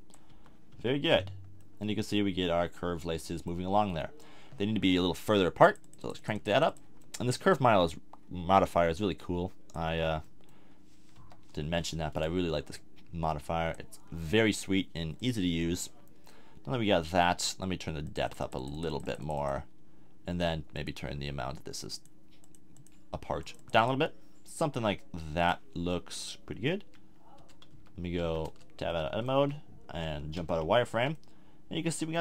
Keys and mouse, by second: 0.3 z, 0.7 z, 3.3-4.0 middle drag, 5.6-8.5 drag, 8.5 middle click, 8.7-9.8 drag, 9.8 z, 10.2-11.1 drag, 11.1 KP_1, 16.5-26.5 middle drag, 26.5-26.8 drag, 26.8 a, 27.4 Tab, 27.7 z, 28.2 z, 28.5 Tab, 29.4 a, 30.3 z, 30.9 a, 31.5 middle drag.